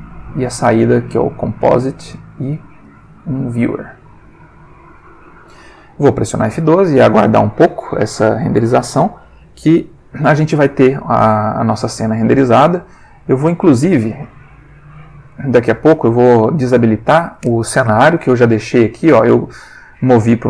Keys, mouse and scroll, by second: 1.1 click, 1.6 click, 2.1 ctrl+shift+click, 2.8-3.6 ctrl+shift+drag, 4.1-5.1 drag, 6.5 F12.